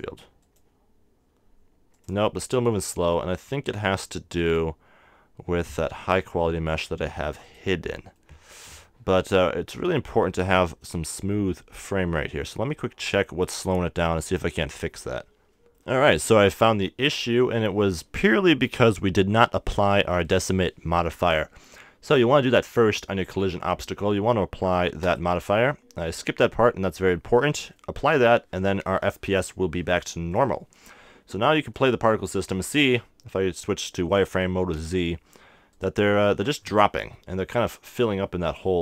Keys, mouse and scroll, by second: 3.5-6.4 drag, 7.4 right click, 8.1 middle click, 9.8 right click, 11.0-12.1 middle drag, 12.5-14.2 middle drag, 15.6-16.9 drag, 15.8 middle click, 16.9-17.9 middle drag, 17.9-22.0 scroll up 1, 22.0-25.0 right drag, 22.6-25.0 middle drag, 25.0-29.2 drag, 30.3-33.9 drag, 34.7 z, 35.7-37.7 right drag, 36.1 KP_1, 36.7-38.1 middle drag.